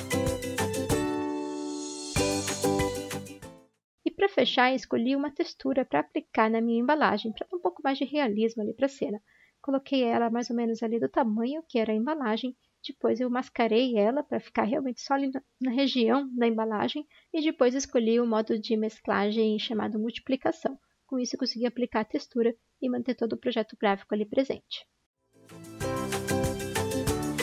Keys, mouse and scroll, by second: 0.9 ctrl+z, 1.1 x, 2.4 ctrl+d, 2.5 ctrl+z, 3.9 alt+Tab, 5.9 ctrl+a, 6.9 ctrl+c, 6.9 ctrl+a, 8.8 ctrl+c, 10.3 ctrl+t, 10.4 ctrl+v.